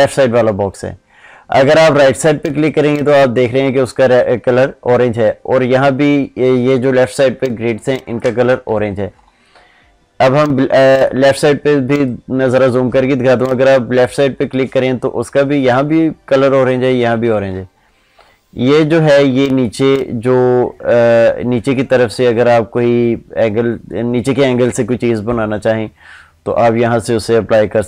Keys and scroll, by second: 7.3 ctrl+space.